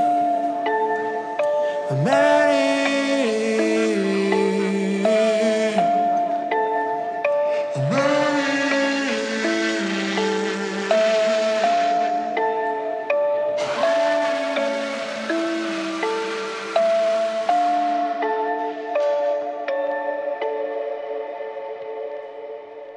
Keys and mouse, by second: 0.7 click, 2.5 KP_1, 4.4 s, 4.8 x, 9.2-12.5 middle drag, 13.4-13.8 shift+middle drag, 14.3-14.7 ctrl+middle drag, 15.0 shift+z, 16.8 s, 17.0 z, 18.5 click, 20.1 click, 22.1 click.